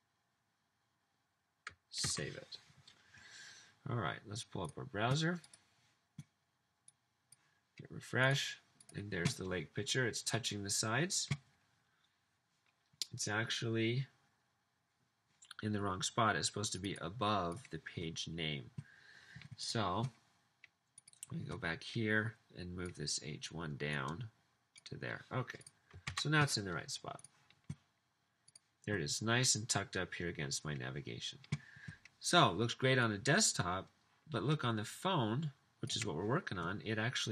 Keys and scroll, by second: 2.2 super+s, 26.1 super+s.